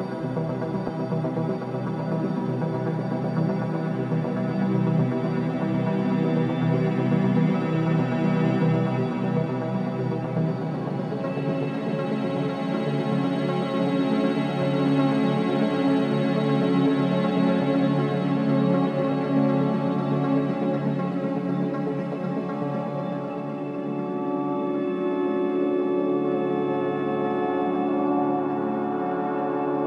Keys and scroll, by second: 0.8 4, 6.0 3, 16.6 ctrl+z, 22.8 4, 25.6 2.